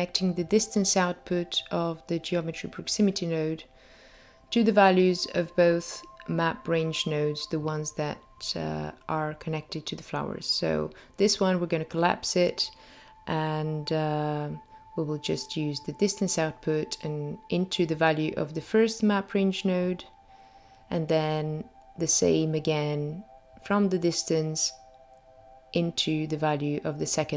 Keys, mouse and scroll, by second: 4.8-5.8 scroll down 3, 5.8 middle click, 9.7 click, 10.9 middle click, 13.8 click, 16.9 middle click, 21.3 click, 22.7 middle click, 26.1 click.